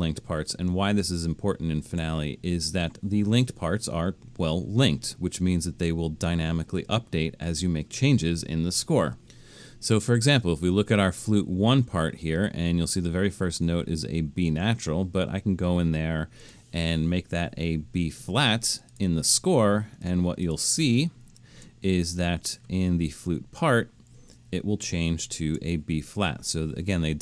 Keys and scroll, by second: 0.7 super+=, 1.6 super+=, 17.7 -, 21.3 alt+super+., 24.5 super+=, 25.0 super+=.